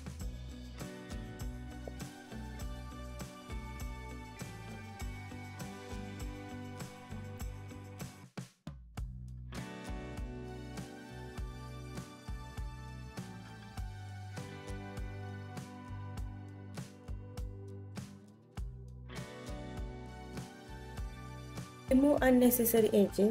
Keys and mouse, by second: 2.7 click, 3.8 ctrl+r, 5.3 click, 6.8 click, 8.1 click, 8.4 click, 9.3 click, 9.8 g, 13.1-14.4 drag, 14.9 g, 17.0 click, 20.4 click, 22.2 x.